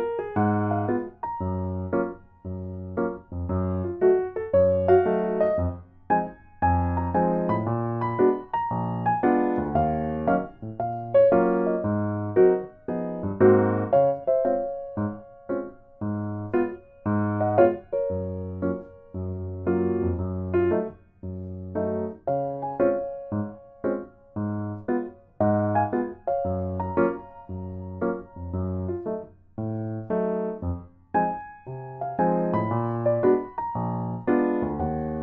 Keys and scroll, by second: 1.2 ctrl+z, 1.8 ctrl+z, 11.3 Tab, 11.9 ctrl+x, 12.3 Delete, 12.6 ctrl+v, 12.6 ctrl+g, 13.0 Tab, 25.2 ctrl+z, 29.5 ctrl+z, 29.8 ctrl+z, 30.3 ctrl+z, 34.1 ctrl+c, 34.2 ctrl+v.